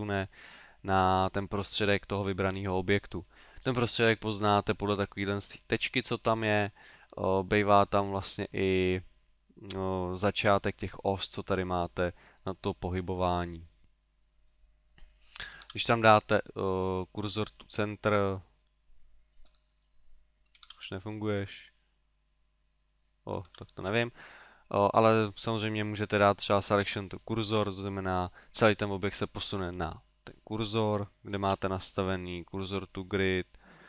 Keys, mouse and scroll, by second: 3.6-5.3 scroll up 2, 5.6-6.4 scroll up 2, 6.4-7.9 scroll down 3, 12.3 click, 15.6 shift+s, 19.5 g, 19.8 click, 20.6 shift+s, 23.4 shift+s, 31.4 shift+s.